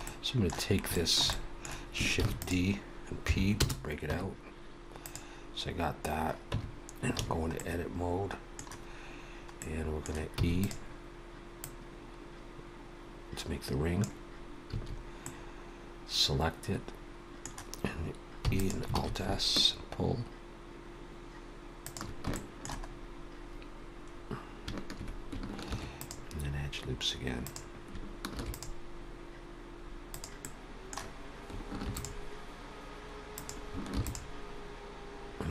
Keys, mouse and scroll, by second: 0.0 middle click, 0.6 scroll up 2, 0.9 shift+middle click, 1.2 middle click, 2.2 shift+d, 3.2 p, 4.0 Tab, 5.0 click, 6.4 Tab, 7.1 a, 7.5 middle click, 9.6 middle click, 10.3 e, 11.6 click, 14.7 a, 15.1 middle click, 18.4 e, 18.9 alt+s, 22.3 shift+middle click, 22.9-23.2 scroll up 1, 24.0-24.6 scroll up 3, 25.6 ctrl+r, 28.3 ctrl+r, 30.4 middle click, 31.8 ctrl+r, 33.9 ctrl+r.